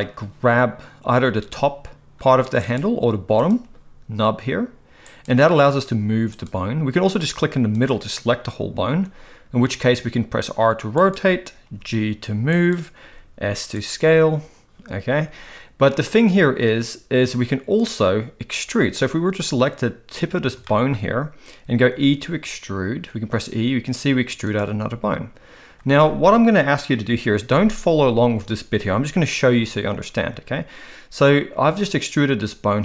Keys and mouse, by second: 1.2 g, 3.4 click, 3.6 g, 5.6 g, 8.8 r, 11.6 g, 13.0 s, 17.9 click, 20.7 shift+middle click, 21.9 e.